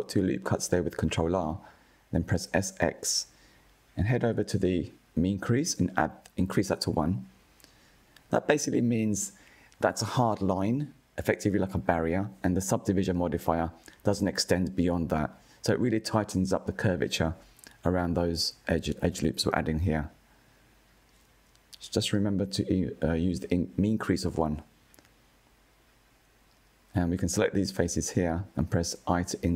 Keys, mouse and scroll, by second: 5.2-7.8 drag, 8.2 middle click, 9.0 click, 9.4-11.3 middle drag, 11.3 ctrl+r, 16.1-18.0 drag, 18.0 ctrl+r, 22.7-23.9 drag, 25.5 click, 26.8-28.6 middle drag, 28.6 shift+click.